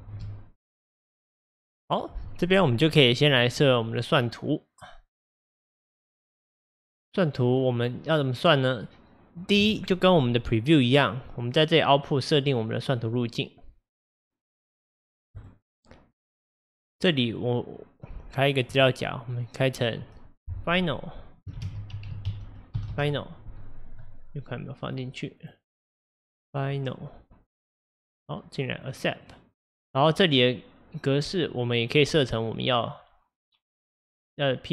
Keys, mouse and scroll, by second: 0.1 space, 15.6-22.9 drag, 25.6-29.3 drag.